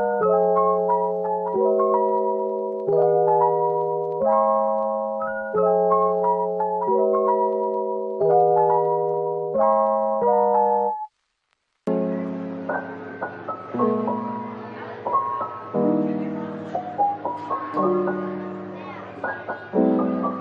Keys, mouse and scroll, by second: 0.3 double click, 0.6-1.6 typing, 4.5 middle click, 5.7-7.0 typing, 9.0 scroll up 1, 9.1-9.8 typing, 10.4-11.1 scroll up 1, 11.6 double click, 11.9 middle click, 14.0 typing, 15.8-17.7 typing, 19.2 Return.